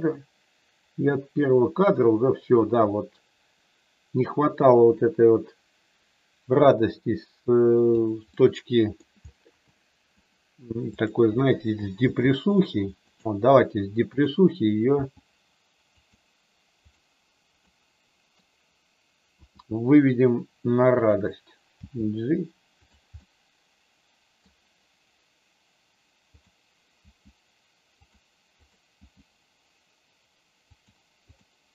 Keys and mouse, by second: 8.3 middle click, 9.7 middle click, 10.9 click, 11.9 g, 13.1 click, 14.2 click, 14.8 g, 15.9 click, 16.8 click, 17.7 middle click, 19.3 r, 21.7 g, 23.1-24.3 middle drag, 26.3 click, 26.8 g, 29.0 g, 30.7 click, 31.3 click.